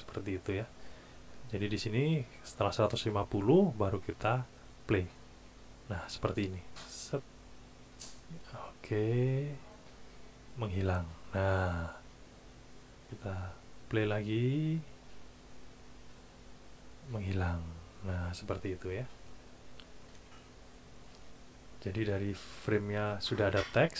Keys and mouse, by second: 6.5 click, 13.8 click.